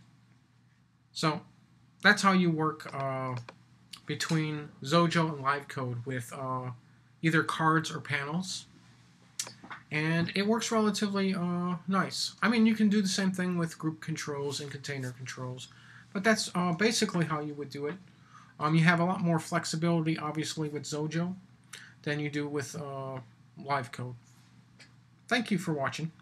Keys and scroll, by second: 10.0 typing.